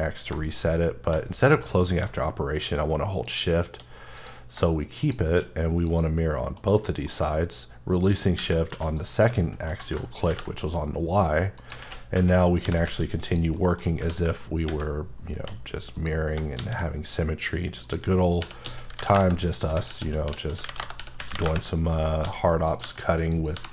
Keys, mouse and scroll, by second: 6.3 middle click, 7.3 scroll up 2, 8.1 click, 8.7 2, 9.0 click, 9.4 alt+z, 11.0-11.6 scroll up 5, 11.6 click, 11.8 alt+z, 12.8 z, 13.2 click, 13.6 middle click, 14.3 middle click, 15.4 h, 15.9 click, 16.6 shift+a, 17.8 click, 18.4 r, 18.6 x, 19.1 KP_Enter, 19.9 alt+r, 20.5-23.7 typing, 20.8 KP_Enter, 21.4 KP_Enter, 23.3 click.